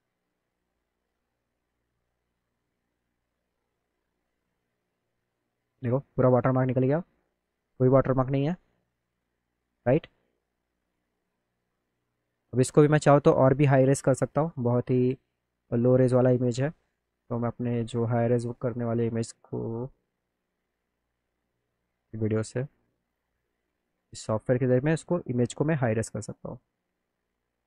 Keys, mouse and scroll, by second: 0.8 click, 2.0 click, 2.9 click, 3.4 click, 4.0 click, 4.2 click, 5.6 middle click, 5.9 middle click, 6.5-7.9 drag, 8.2 click, 10.7 click, 11.9 click, 13.3 click, 16.0 click, 17.9 click, 18.4 click, 18.8 click, 20.4 click, 25.4 click, 26.3 click, 26.8 click, 27.3 click.